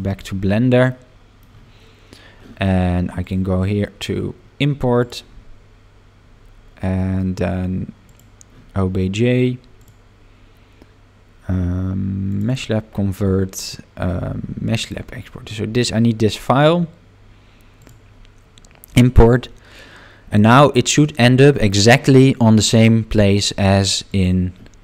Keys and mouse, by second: 0.9 middle click, 3.2-8.4 drag, 24.1 click.